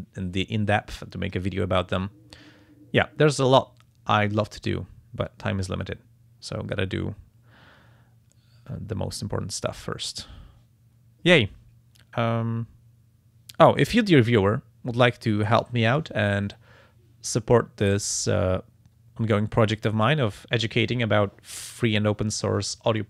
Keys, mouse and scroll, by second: 4.2 click.